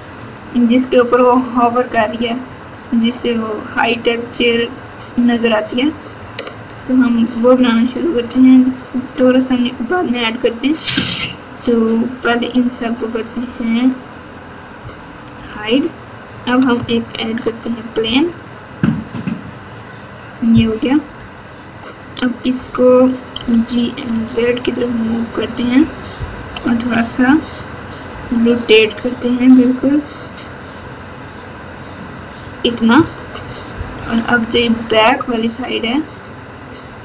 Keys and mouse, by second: 4.1 middle click, 6.7 ctrl+KP_6, 7.2 ctrl+KP_6, 8.0 KP_2, 12.0 click, 15.3 h, 17.2 shift+a, 21.0 KP_8, 23.3 g, 26.3 KP_1, 28.0 r, 32.9 Tab, 33.9 KP_8, 35.9 click.